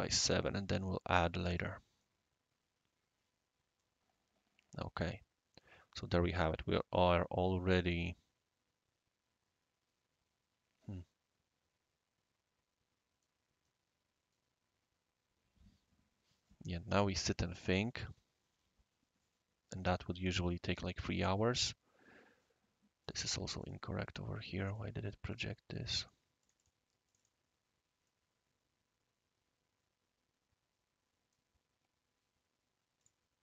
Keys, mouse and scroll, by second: 1.5 click, 1.8-2.3 drag, 2.0-6.0 middle drag, 2.0-6.3 right drag, 6.3-7.1 middle drag, 6.7-13.2 right drag, 23.0 click, 23.6 click, 24.7 click, 25.3 click, 26.0 click, 26.4 click, 26.6 click, 27.1 click, 28.1-31.4 right drag, 33.0 click.